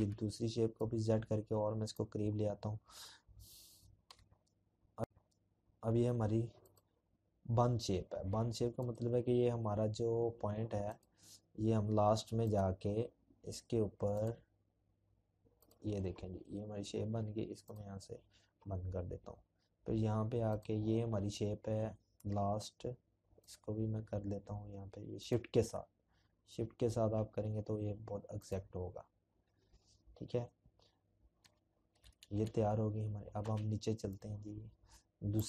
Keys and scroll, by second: 1.7 p, 28.1 ctrl+-, 28.7 ctrl+-, 30.2 z, 35.1 z, 35.3 z.